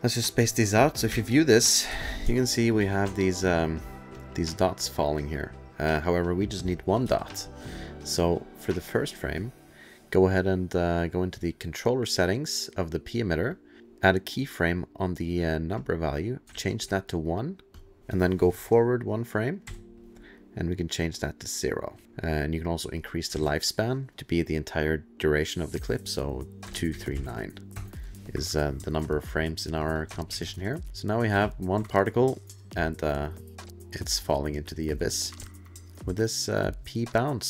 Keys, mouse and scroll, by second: 0.2 click, 1.1 2, 1.9 space, 2.2 space, 2.8 space, 3.2-4.1 alt+click, 4.1 alt+click, 4.4-5.6 alt+middle click, 4.5 alt+middle click, 5.6-6.0 alt+scroll, 7.0 alt+space, 7.5 click, 9.4 click, 11.4 click, 13.9 click, 16.1 click, 16.8 ctrl+a, 16.8 1, 17.8 click, 18.1 click, 19.6 Right, 21.1 click, 23.0 click, 24.1 ctrl+a, 26.6 KP_2, 26.9 KP_3, 27.1 KP_9, 27.7 KP_Enter, 29.6 click, 29.8 click, 29.9 click, 30.1 ctrl+click, 30.3 ctrl+s, 30.3 ctrl+click, 30.4 ctrl+click, 30.6 click, 30.9 alt+scroll, 31.3 space, 31.9-32.7 alt+scroll, 34.0 alt+middle click, 34.6 click, 35.1 alt+space, 35.5 alt+middle click, 35.5 alt+click, 35.9 alt+middle click, 37.1 alt+click.